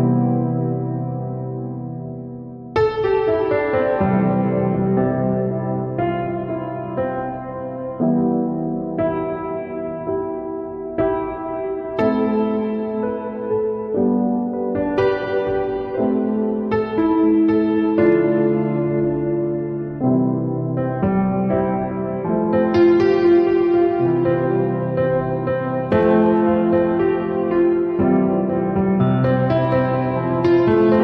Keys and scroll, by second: 2.0 ctrl+0.